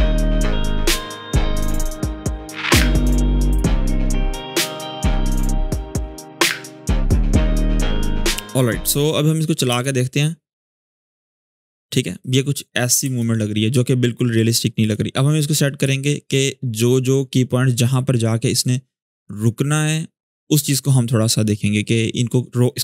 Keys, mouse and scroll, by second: 0.6 g, 0.9-3.4 drag, 3.6 v, 3.7-4.0 click, 4.4 g, 4.6-5.0 alt+click, 5.3-6.9 drag, 7.0 scroll down 1, 7.1 ctrl+s, 7.5-9.4 drag, 9.4 space, 11.9 space, 12.0-12.9 click, 12.8 space, 14.7-20.9 drag.